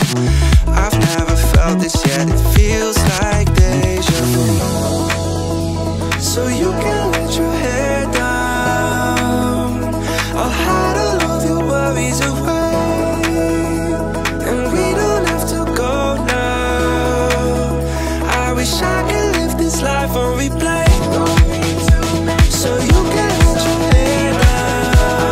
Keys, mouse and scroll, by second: 2.0 click, 3.9 click, 4.5-5.2 drag, 5.5 middle click, 6.3 a, 7.5 ctrl+f, 10.8 click, 13.1 alt+click, 14.5 alt+shift+click, 15.8 alt+shift+click, 16.7 alt+shift+click, 19.0 click, 20.7 e, 21.1 s.